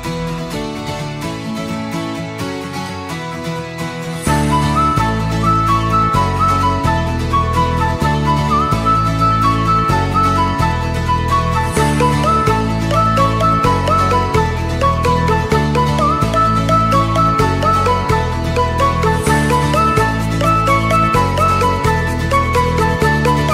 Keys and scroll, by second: 16.9 r, 20.2 F9.